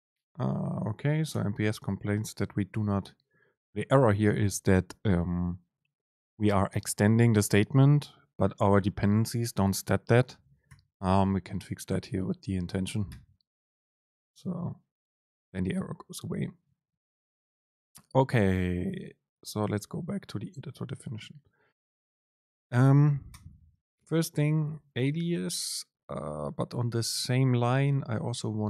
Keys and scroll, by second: 20.6 super+space, 24.1 Right.